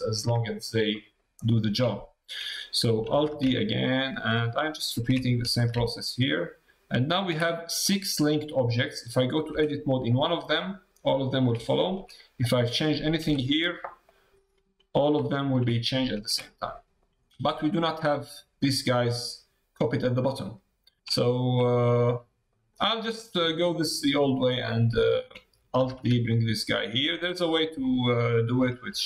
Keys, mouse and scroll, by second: 0.4 shift+middle click, 0.9 middle click, 1.3 shift+middle click, 3.1 alt+d, 7.5 middle click, 8.5 middle click, 9.5 Tab, 10.0 middle click, 11.6 shift+middle click, 14.1 g, 15.9 middle click, 16.2 Tab, 16.6 middle click, 20.3 middle click, 21.2 shift+middle click, 21.6 middle click, 22.7 middle click, 23.1 shift+middle click, 24.5 middle click, 25.0 shift+middle click, 27.4 middle click.